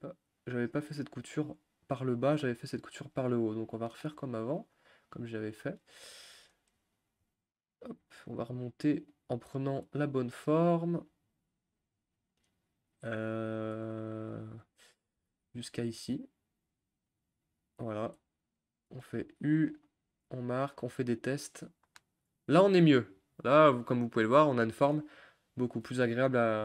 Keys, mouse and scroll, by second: 0.6 ctrl+z, 1.4-3.5 middle drag, 3.5-3.8 scroll up 2, 3.8 middle click, 4.7 click, 5.6-6.3 scroll down 1, 6.3-8.4 middle drag, 8.4 ctrl+click, 9.2 ctrl+click, 9.4-14.7 middle drag, 14.7 ctrl+click, 15.3 ctrl+z, 15.8 ctrl+click, 16.0-19.8 middle drag, 19.8 u, 20.3 a, 21.6 u.